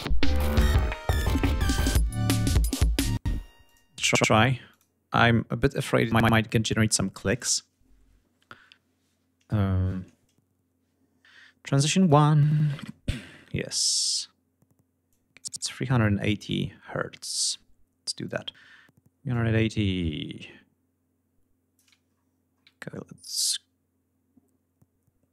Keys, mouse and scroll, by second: 2.8 space, 3.3 click, 4.3-7.4 drag, 11.4 click, 12.6-13.0 scroll down 2, 14.4 click, 15.4 click, 16.7 click, 17.5 click, 18.5-21.1 drag, 21.3 ctrl+scroll down 2, 22.4-25.3 drag.